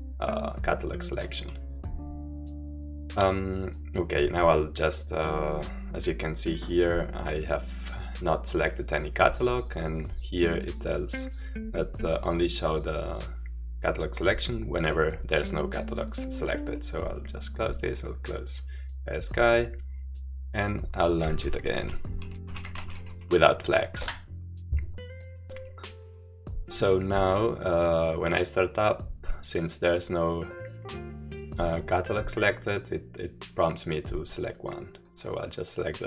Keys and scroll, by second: 22.2-23.5 typing, 24.0 Return, 26.3 typing.